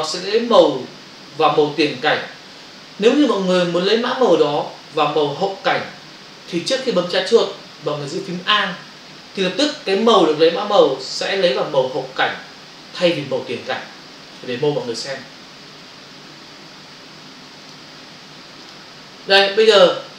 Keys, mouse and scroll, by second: 14.8 f, 17.6 click.